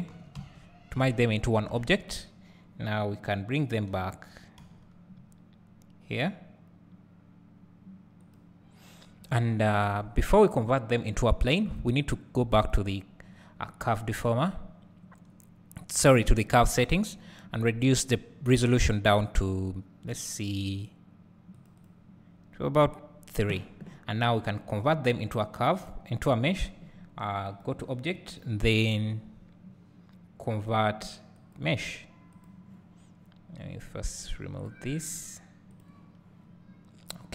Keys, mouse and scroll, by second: 0.4 Tab, 1.7 Tab, 4.7 g, 19.2-32.4 drag, 34.7-37.3 drag.